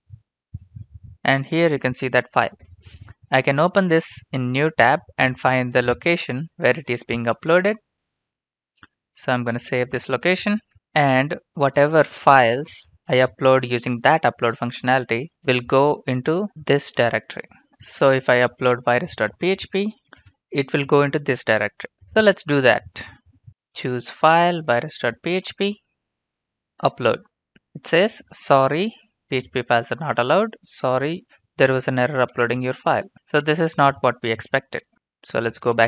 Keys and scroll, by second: 8.9 ctrl+c, 9.6 Return, 10.3 typing, 10.5 ctrl+v, 14.6 alt+f, 15.4 Return, 16.5 alt+f, 17.7 Return, 19.1 ctrl+c, 19.8 ctrl+v, 19.8-20.7 typing, 22.1 alt+Tab, 32.2 ctrl+c, 32.7 alt+Tab, 33.1 Return, 33.1 ctrl+v, 34.7 alt+Tab.